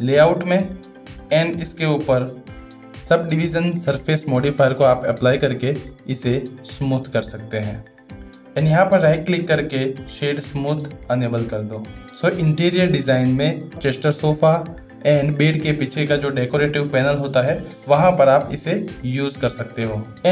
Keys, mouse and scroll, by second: 1.2 middle click, 2.2 middle click, 6.2-8.4 drag, 9.2-17.8 right drag, 17.8-20.0 middle drag.